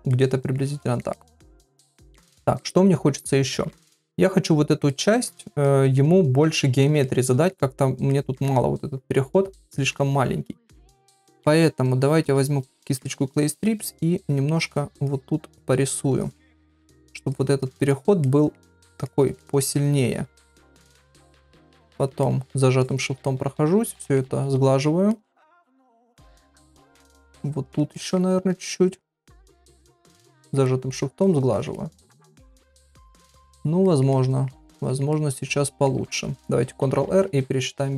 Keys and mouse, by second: 0.1 middle click, 0.8 ctrl+middle click, 1.1 ctrl+middle click, 2.1 ctrl+middle click, 2.6-3.6 middle drag, 3.8 ctrl+middle click, 4.9 middle click, 5.6 middle click, 7.0 middle click, 8.1 middle click, 9.6 middle click, 12.7 middle click, 14.2 click, 14.6 click, 15.1 click, 15.5 click, 15.9 click, 16.2 click, 16.5 middle click, 17.3 click, 17.9 click, 18.2 middle click, 19.0 click, 19.4 middle click, 20.0 click, 20.4 click, 20.9 click, 21.4 shift+click, 21.6 shift+click, 21.9 shift+click, 22.2 middle click, 22.8 shift+click, 23.2 middle click, 25.1 middle click, 25.5 ctrl+middle click, 25.7 middle click, 26.1 ctrl+middle click, 27.1 click, 27.4 click, 27.6 click, 27.9 middle click, 28.6 click, 29.0 click, 29.2 click, 29.4 click, 29.8 shift+click, 30.6 middle click, 31.2 shift+click, 31.5 shift+click, 31.7 middle click, 32.2 shift+click, 32.6-33.6 middle drag, 33.8 ctrl+middle click, 34.1 middle click, 34.7 ctrl+middle click, 35.1 middle click.